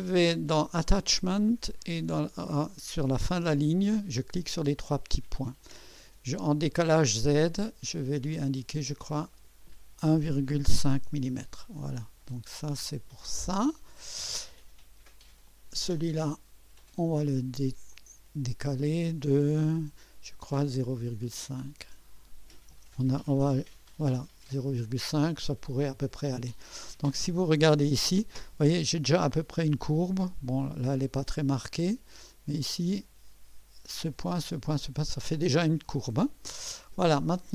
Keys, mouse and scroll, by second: 2.3 click, 4.5 click, 9.0 click, 10.2 KP_1, 10.3 KP_1, 10.5 KP_Decimal, 10.7 KP_5, 11.0 Return, 12.3 scroll up 1, 13.1 right click, 15.4 click, 15.5 typing, 16.8 click, 17.9 click, 21.6 click, 22.5-24.0 typing, 27.1 scroll up 2, 27.6-28.2 right drag, 31.1 right click, 32.3 right click, 36.5 scroll down 2.